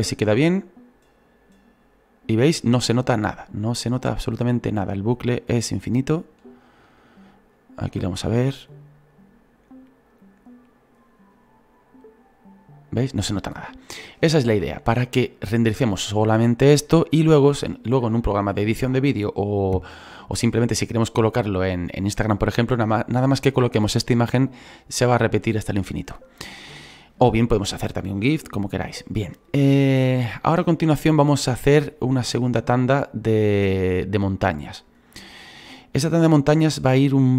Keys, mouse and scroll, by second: 4.5-6.1 drag, 6.1-9.1 shift+middle drag, 14.5 space, 15.7-35.0 drag, 35.0-37.3 middle drag.